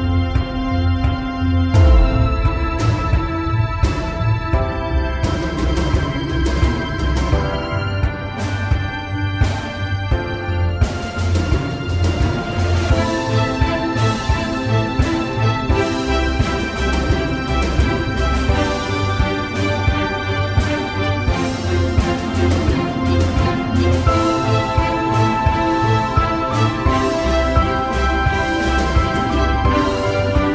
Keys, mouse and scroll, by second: 0.2 alt+right click, 0.4 alt+right click, 0.8 alt+right click, 1.2 alt+right click, 6.7 alt+right click, 6.9 alt+right click, 14.6 alt+right click, 15.1 alt+right click, 15.3 alt+right click, 16.4 alt+right click, 17.3 alt+right click, 17.6 alt+right click, 17.8 alt+right click, 18.5 alt+right click, 18.8 alt+right click, 19.2 alt+right click, 19.8 alt+right click, 23.0 alt+right click.